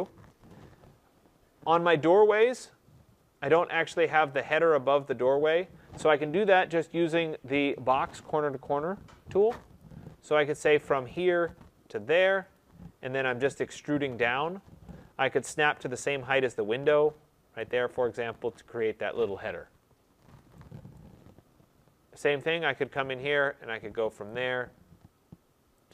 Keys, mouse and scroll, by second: 0.7 middle click, 1.2 middle click, 1.3 middle click, 2.9 middle click, 3.0 middle click, 9.7 click, 11.1 click, 12.4 click, 15.4 right click, 17.6 click, 18.4 middle click, 18.5 middle click, 20.4 middle click, 20.8 right click, 21.3 middle click, 22.6 middle click, 22.8 click, 24.2 click, 25.8 click.